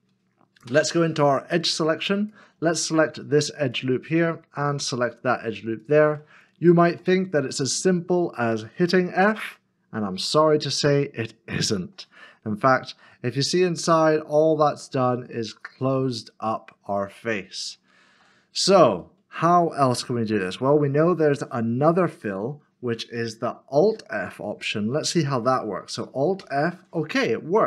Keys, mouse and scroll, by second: 0.7 2, 2.9 alt+click, 3.7 alt+shift+click, 4.7 alt+shift+click, 5.8 alt+shift+click, 6.6 scroll up 1, 7.2 shift+middle click, 9.4 f, 10.4 middle click, 12.6 shift+z, 13.2 middle click, 19.0 shift+z, 19.0 middle click, 19.9 ctrl+z, 26.4 alt+f.